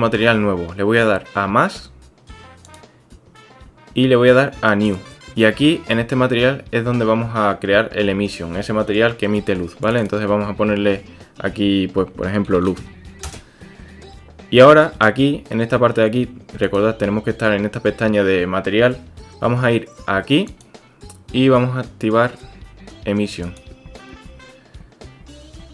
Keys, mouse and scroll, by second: 2.8 click, 4.8 click, 9.8-14.2 drag, 16.7 click, 20.6-23.6 drag.